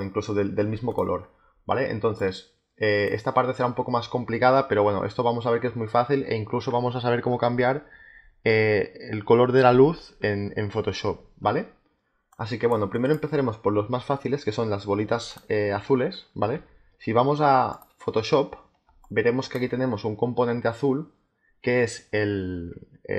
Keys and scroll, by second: 17.7 space.